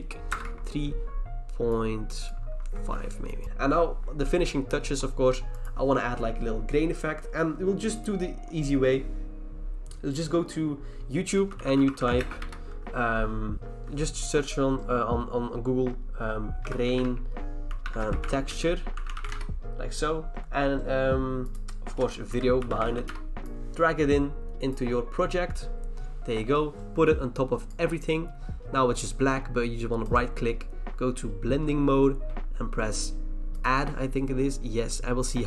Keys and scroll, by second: 0.3 BackSpace, 0.4 BackSpace, 2.5 5, 11.2-12.7 typing, 13.5 ctrl+c, 16.4-19.7 typing, 22.0-23.4 typing.